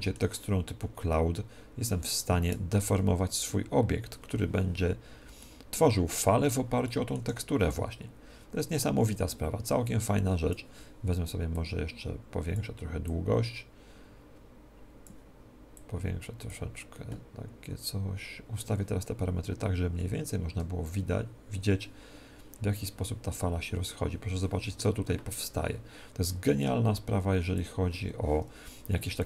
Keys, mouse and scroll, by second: 2.8 alt+a, 5.4-8.7 middle drag, 7.1 Escape, 8.7-29.1 drag, 29.1-29.2 middle drag.